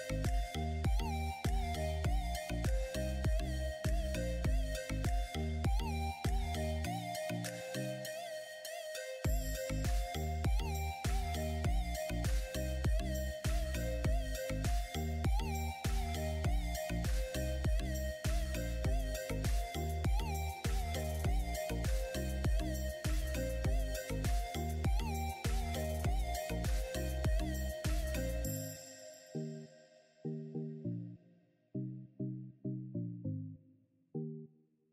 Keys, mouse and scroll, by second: 0.7 alt+click, 3.2-5.6 alt+shift+drag, 5.6-10.4 alt+shift+drag, 10.6 right click, 12.7-20.1 drag, 20.1-25.6 alt+shift+drag, 25.6 right click, 33.3-34.9 drag.